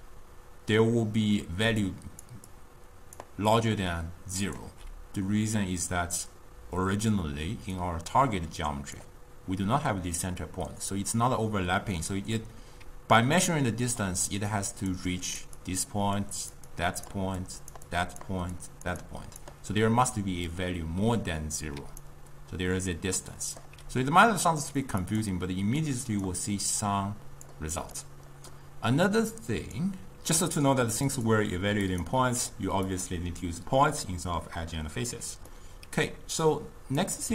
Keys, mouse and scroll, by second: 2.0 click, 2.4-3.6 d, 2.6 click, 2.8 d, 3.1 click, 3.2 d, 3.6-4.7 drag, 4.7 d, 7.9-10.9 drag, 12.9-19.7 typing, 14.6 click, 15.3 click, 15.7 click, 16.4 click, 16.9 click, 17.5 click, 18.0 click, 18.7 click, 19.2 click, 21.9 d, 22.2-23.7 right drag, 23.7 d, 23.8 d, 24.8 d, 24.8 click, 26.0 click, 26.9-28.1 drag, 28.1-29.2 middle drag, 29.2 click, 31.1-35.5 drag, 35.5-36.5 middle drag, 36.5 click.